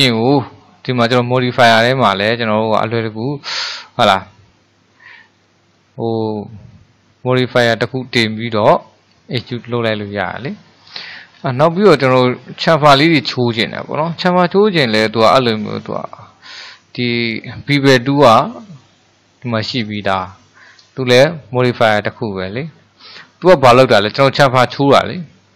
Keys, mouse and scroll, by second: 5.3-8.4 middle drag, 9.6-11.5 middle drag, 11.5-12.1 scroll up 2, 12.2-15.4 shift+middle drag, 15.4-18.5 drag, 22.9-23.3 scroll down 1, 23.3-23.9 shift+middle drag, 23.9-24.5 scroll up 4, 24.5-25.5 middle drag.